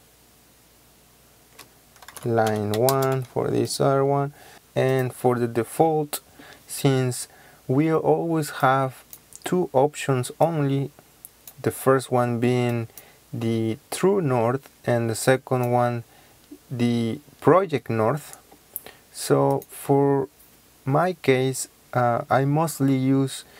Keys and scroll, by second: 2.1-3.2 typing, 4.5 1.